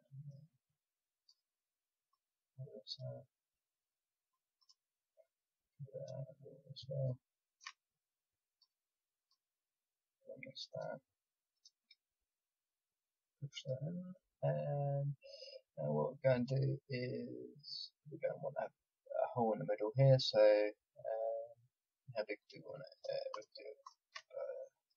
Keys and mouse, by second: 0.0-1.1 middle drag, 1.1-7.0 drag, 7.0 middle click, 8.5-14.1 drag, 14.1 middle click, 16.3-24.3 drag.